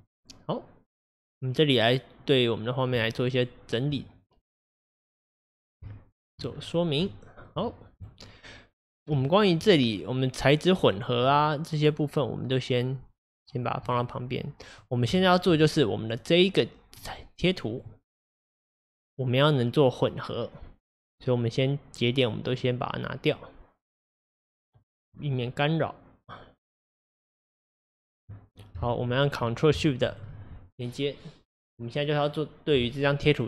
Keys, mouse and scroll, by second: 2.5 scroll down 2, 3.1-4.7 shift+middle drag, 4.7-5.9 drag, 5.9-6.5 shift+middle drag, 6.5 scroll down 2, 7.1-14.4 shift+middle drag, 14.4-22.6 drag, 24.8 click, 26.7 click, 27.7 click, 30.1 ctrl+shift+click.